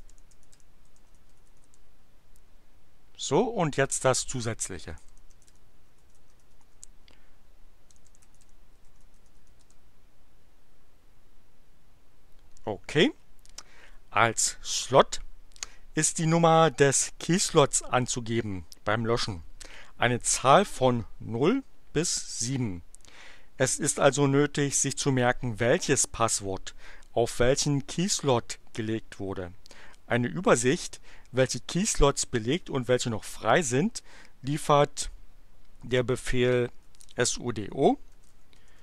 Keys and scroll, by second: 0.0-1.9 typing, 4.6-9.8 typing, 36.6-38.8 typing.